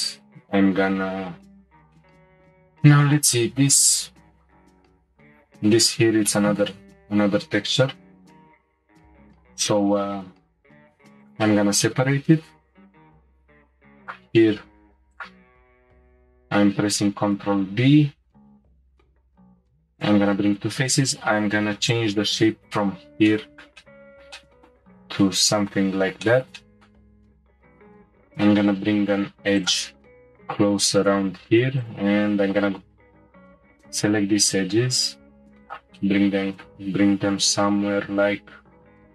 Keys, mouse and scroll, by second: 2.0-4.6 middle drag, 4.6 3, 5.2 alt+click, 6.2 middle click, 7.0-10.0 scroll up 1, 10.8 p, 11.8 shift+middle click, 12.2 scroll down 1, 13.3 click, 14.0 alt+click, 14.8 Tab, 15.1 click, 15.4 Tab, 16.6 ctrl+b, 21.9-23.3 drag, 23.3-27.4 shift+middle drag, 27.4 ctrl+r, 31.8 alt+click, 32.6-33.1 scroll up 1, 33.7 s, 36.0-37.3 middle drag, 37.3 s.